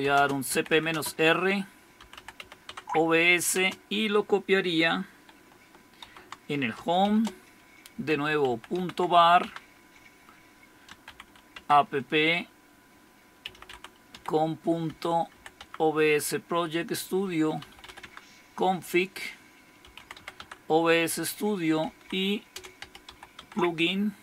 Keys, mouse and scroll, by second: 0.0-3.5 typing, 5.8-9.1 typing, 10.6-12.0 typing, 13.2-18.3 typing, 19.6-23.5 typing.